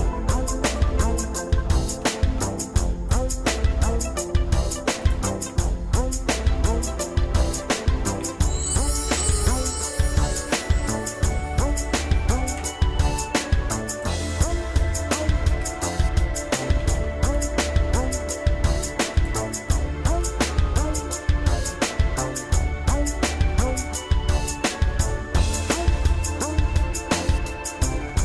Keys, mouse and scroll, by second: 0.2 scroll up 1, 0.6 click, 1.1 Tab, 1.7 shift+middle click, 2.3 ctrl+Tab, 3.5 scroll up 1, 4.3 scroll down 1, 5.0 alt+shift+click, 7.4 f, 9.2 e, 11.0 s, 12.5 alt+m, 14.8 shift+middle click, 15.8 Tab, 16.9 ctrl+s, 19.3 click, 21.7 shift+middle click, 23.4-25.5 shift+middle drag, 26.1 Tab, 28.0 ctrl+Tab.